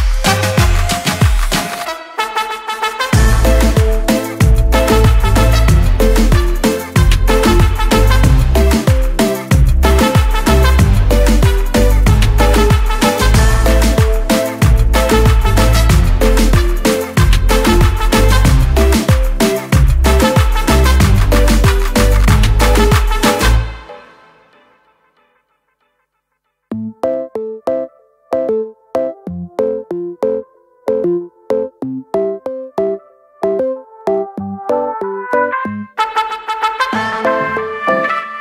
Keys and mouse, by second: 2.1 click, 4.5 click, 5.3 click, 8.0 click, 11.1 click, 12.4 click, 14.7 click, 16.0 click, 19.6 click, 20.9 click, 20.9 p, 23.4 click, 25.4 click, 27.1 click, 28.4 click, 31.0 ctrl+d, 32.7 click.